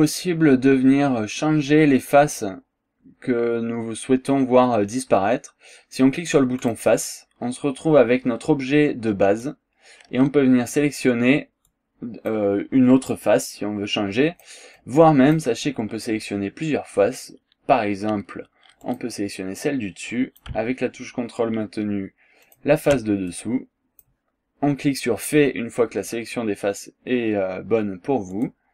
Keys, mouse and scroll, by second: 6.6 click, 9.5-10.9 drag, 11.7 click, 13.1-14.7 drag, 14.8 click, 15.6 scroll down 2, 15.9 scroll up 1, 18.9 click, 19.6 click, 22.5 ctrl+click, 23.3-24.2 ctrl+drag, 28.4 click.